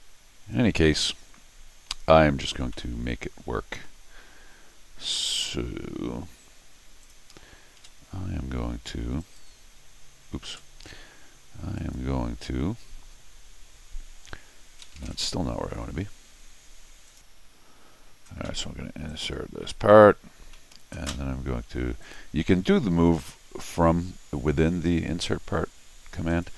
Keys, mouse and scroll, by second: 2.7-3.8 middle drag, 7.0 click, 7.8 alt+q, 9.2 click, 10.5 alt+q, 11.8 click, 14.9 alt+q, 17.1 click, 19.1 click, 20.5 middle click, 22.0 click, 23.1 scroll up 1, 24.1 scroll up 1, 26.3 click.